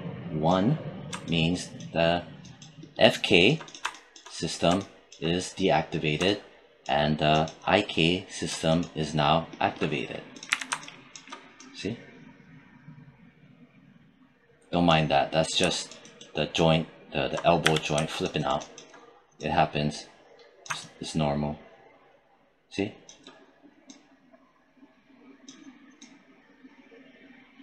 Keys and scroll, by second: 10.3 w, 17.4 z.